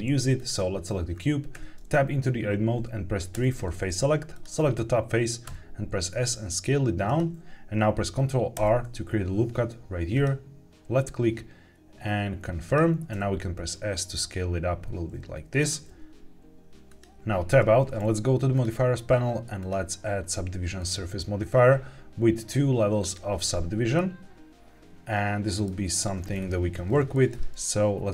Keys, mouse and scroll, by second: 0.3 click, 1.0-1.4 scroll up 1, 1.4 Tab, 3.2 3, 4.2 click, 5.4 s, 7.0 click, 8.5 ctrl+r, 12.5 click, 13.0 s, 15.5 click, 15.7 g, 15.8 z, 16.8 click, 17.4 Tab, 18.4 click, 19.5-20.8 drag, 22.9 click, 23.9-25.6 middle drag, 26.2-26.9 scroll up 3, 26.9 scroll up 1, 27.0 shift+middle click.